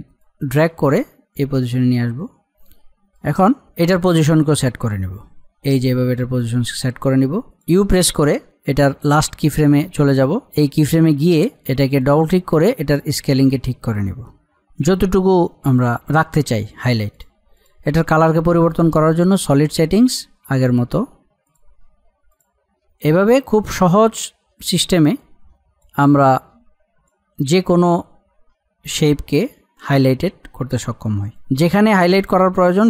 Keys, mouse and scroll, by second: 2.8-3.2 scroll, 3.2-4.5 middle drag, 4.5-7.5 drag, 8.5 u, 9.0 click, 12.0-27.8 drag, 27.8-28.4 scroll up 1, 29.1 click, 30.1-31.4 drag, 31.7-32.8 drag.